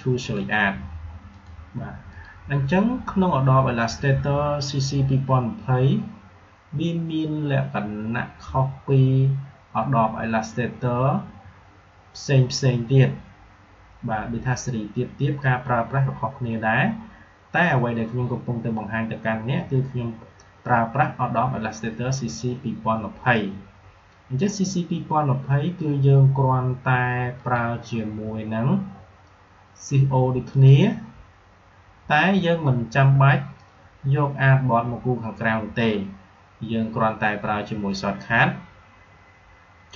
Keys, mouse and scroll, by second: 27.3 click, 30.4 click.